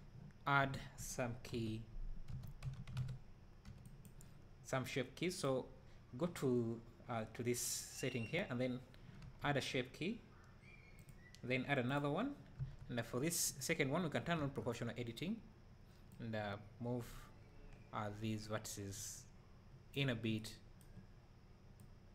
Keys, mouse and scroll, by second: 1.5 KP_7, 2.3 1, 3.0 alt+a, 4.1 b, 9.2 Tab, 11.1-12.1 drag, 12.6 Tab, 14.4 o, 16.2-20.4 drag, 20.4 e, 22.0 click.